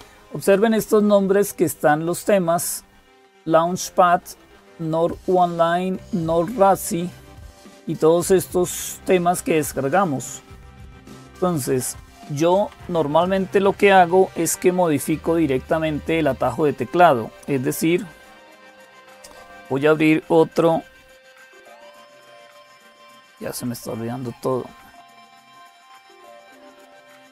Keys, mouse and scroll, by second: 0.0-27.3 typing, 9.9 click, 10.9 click, 13.0 click, 16.6 click, 24.1 ctrl+super+j, 26.4 super+m.